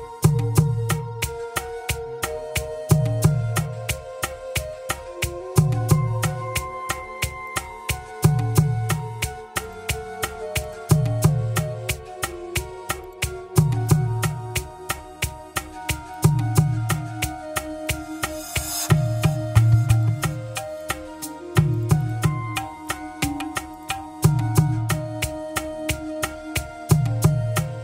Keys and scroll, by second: 24.5 Return.